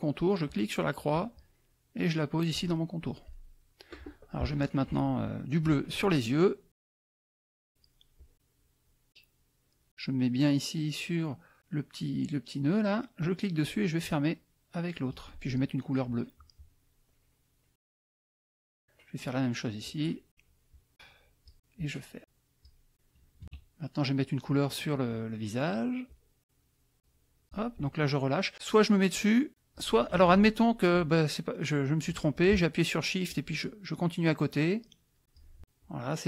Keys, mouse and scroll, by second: 0.4-3.1 drag, 3.3 middle click, 6.9 click, 8.2 click, 13.2-15.3 drag, 17.8 click, 19.8-21.6 drag, 21.8-22.8 drag, 22.9 middle click, 23.4 KP_Subtract, 24.0 middle click, 26.0-27.6 drag, 29.5 click, 30.2 ctrl+z, 33.2-35.5 shift+drag, 35.8 shift+click.